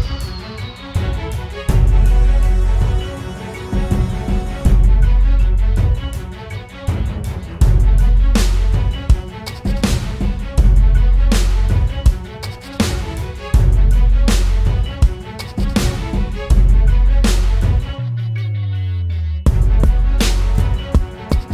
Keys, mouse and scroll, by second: 10.5-13.2 typing.